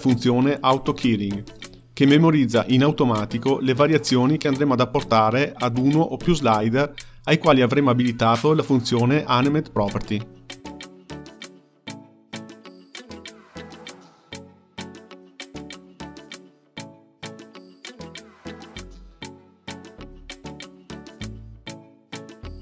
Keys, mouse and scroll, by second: 1.7 click, 5.4 click, 8.3-9.8 drag, 10.3-17.1 drag, 17.1-18.6 middle drag, 18.6-22.0 drag.